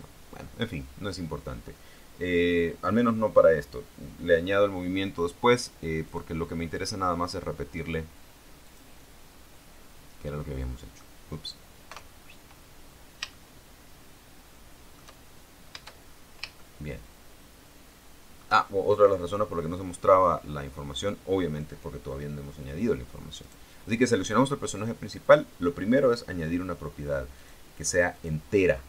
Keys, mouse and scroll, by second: 6.2 click, 7.4 middle click, 8.8 click, 10.7 middle click, 12.1 KP_0, 13.1 scroll down 2, 13.5-15.3 shift+middle drag, 15.4 shift+scroll up 2, 16.2 shift+scroll up 2, 16.7-18.7 shift+middle drag, 23.6 right click, 25.4 click, 27.5 click, 28.3 click.